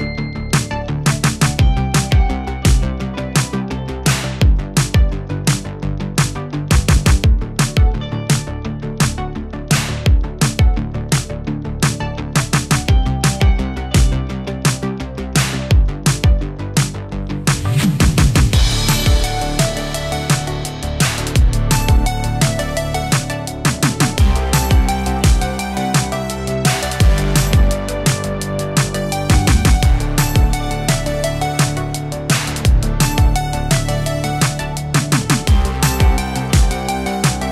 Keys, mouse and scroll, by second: 16.9 click, 20.0 click, 21.2 ctrl+d, 23.0 Return, 23.5 Right, 23.9 shift+Left, 24.4 shift+Left, 24.6 Return, 27.8 p, 28.7 scroll up 1, 29.8-30.7 middle drag, 31.5-34.9 drag.